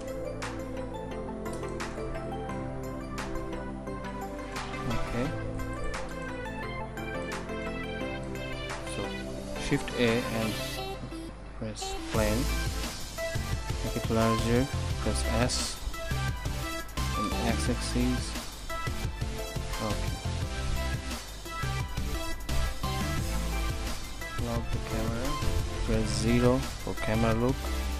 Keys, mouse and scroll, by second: 0.0 Return, 5.5 ctrl+s, 9.1 shift+a, 14.7 s, 17.0 s, 21.6 n, 24.5 click.